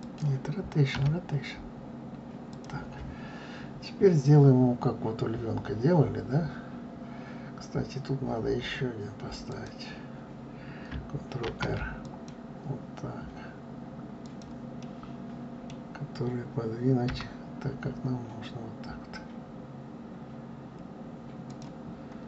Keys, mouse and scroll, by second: 0.9 r, 3.7-6.0 scroll up 2, 9.4 click, 11.4 ctrl+r, 14.8-17.1 middle drag, 17.1 g, 21.9-22.2 scroll up 3.